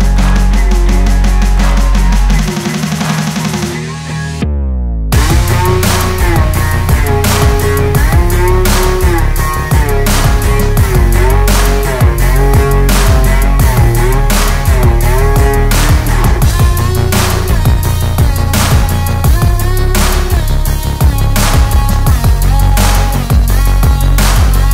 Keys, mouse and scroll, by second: 10.1-13.2 drag, 14.5 alt+scroll down 1, 14.7-15.2 alt+scroll up 1, 15.6-16.6 alt+scroll down 1, 16.7 click, 24.3 click.